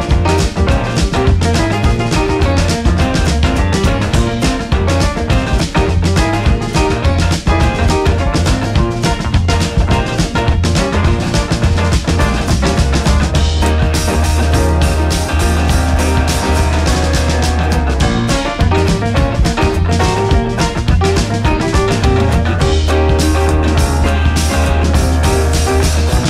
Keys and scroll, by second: 0.1 Left, 0.4 Down, 0.7 Left, 1.3 Up, 2.3 Down, 4.1 Down, 4.3 Left, 4.6 Down, 6.1 Left, 9.9 ctrl+=, 11.1 ctrl+-, 17.2 ctrl+-, 17.4 ctrl+0, 19.7 space.